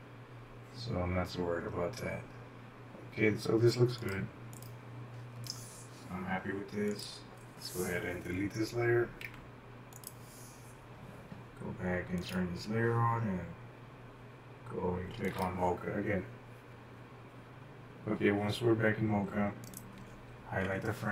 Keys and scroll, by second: 0.4 shift+Left, 0.6 shift+Left, 1.2 shift+Left, 1.3 shift+Left, 1.7 typing, 1.8 shift+Right, 2.3 shift+Right, 2.7 shift+Left, 9.3 Delete.